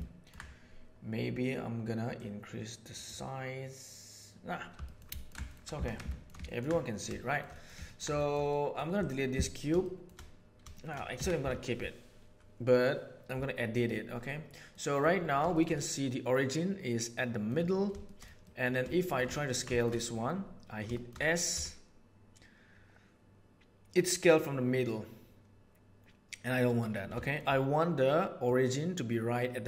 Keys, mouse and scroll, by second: 2.1 middle click, 4.8 shift+middle click, 5.1 ctrl+middle click, 5.8 alt+a, 6.0 middle click, 6.4 middle click, 7.2 middle click, 7.5 middle click, 7.8 ctrl+middle click, 8.2 shift+middle click, 8.5 middle click, 9.8 shift+middle click, 10.7 shift+middle click, 11.2 Tab, 13.6 click, 14.7 middle click, 15.5 shift+middle click, 15.7-17.5 middle drag, 17.9 shift+middle click, 18.4 middle click, 18.9 shift+middle click, 19.3 ctrl+middle click, 20.8 shift+middle click, 21.5 s, 27.2 shift+middle click, 28.4-29.6 middle drag.